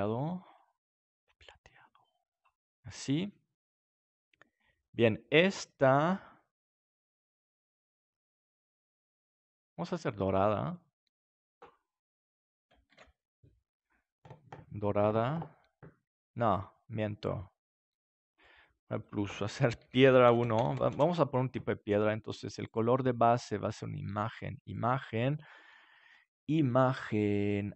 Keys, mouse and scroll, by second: 0.5-2.6 drag, 9.4-12.8 drag, 12.8 ctrl+s, 18.3-21.5 drag, 22.6-24.4 drag, 27.7 click.